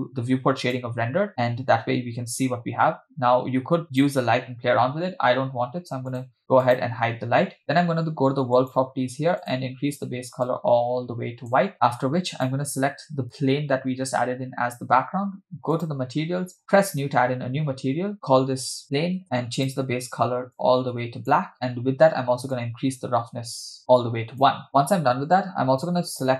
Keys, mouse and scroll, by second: 0.9 click, 3.9 click, 6.3 click, 6.7 drag, 8.6 click, 9.4 click, 12.3 click, 15.8 click, 16.6 click, 18.1-19.2 drag, 19.7 drag, 21.5-22.5 scroll down 2, 22.5-24.6 drag.